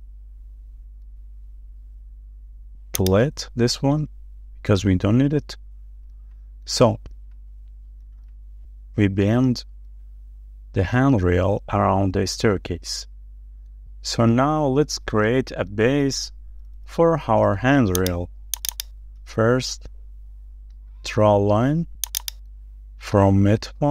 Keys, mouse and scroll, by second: 2.7 shift+middle click, 4.5 Delete, 6.0 shift+middle click, 8.0 scroll up 1, 8.1 shift+middle click, 9.3 middle click, 9.7 shift+middle click, 13.9 scroll up 1, 14.2-14.7 scroll down 1, 15.1 middle click, 16.6-17.3 scroll up 1, 17.3 shift+middle click, 18.8 double click, 19.1 scroll up 1, 19.5 shift+middle click, 21.5-21.8 scroll up 1, 22.2 double click, 22.6 scroll up 1, 22.9 shift+middle click.